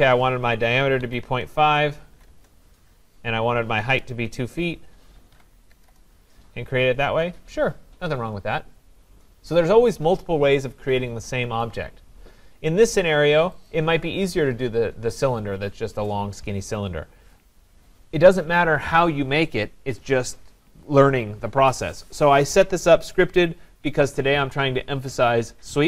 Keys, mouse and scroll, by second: 0.6-2.5 typing, 5.1-5.8 typing, 5.9 Return, 7.0-7.4 scroll, 13.7 click.